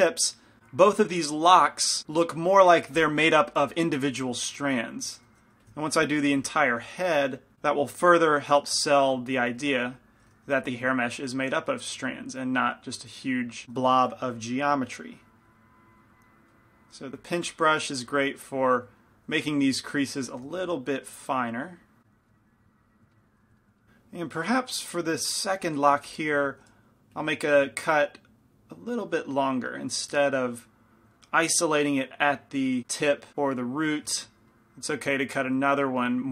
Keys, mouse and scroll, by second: 2.2 middle click, 5.3 shift+c, 5.5 shift+f, 5.9-7.5 drag, 6.5 f, 7.1 f, 7.8-9.9 drag, 9.0 shift+f, 9.9 f, 10.5 f, 11.3-13.6 drag, 13.9 p, 14.3 f, 15.1-16.8 drag, 16.7 right click, 16.8 middle click, 17.4-22.4 drag, 17.4-19.0 right drag, 19.0-22.2 middle drag, 20.6 f, 22.4 middle click, 22.7-24.7 drag, 22.7-27.3 middle drag, 26.1 f, 26.6 shift+f, 28.1-30.2 drag, 31.6-32.7 middle drag, 32.7 click, 33.3-35.6 middle drag.